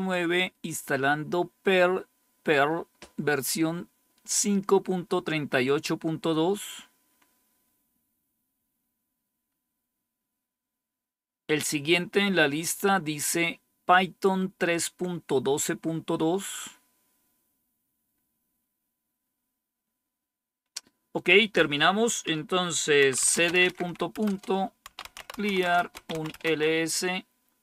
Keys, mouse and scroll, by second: 21.3 click, 22.8-26.6 typing.